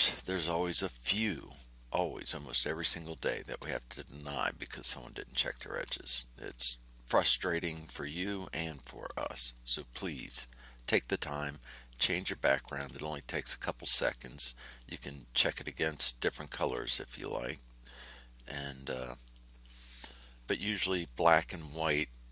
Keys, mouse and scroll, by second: 6.4 ctrl+scroll up 2, 9.5 ctrl+click, 10.4 ctrl+scroll down 2, 11.7 click, 12.6 5, 14.1 click, 14.6 click, 16.5 5, 17.9 click, 19.2 click.